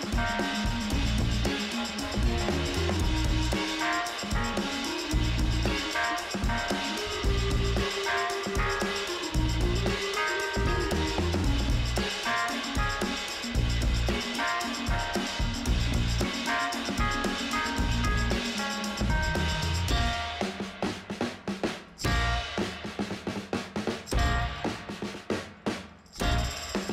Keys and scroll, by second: 7.6 5, 8.0 0, 8.5 Return.